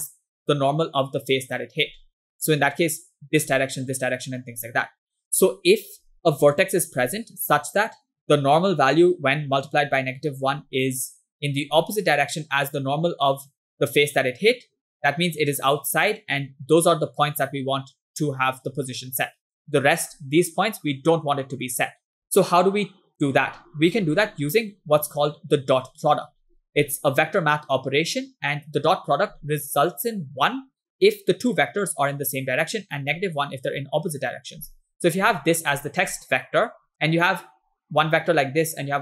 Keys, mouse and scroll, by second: 0.3-1.9 drag, 2.5 click, 3.5 click, 4.6 click, 5.0 click, 6.5 click, 12.6-14.2 drag, 15.2-16.4 drag, 17.1 click, 18.2 click, 20.4 click, 23.5-29.4 ctrl+drag, 34.8 click, 35.8 click, 37.6 click.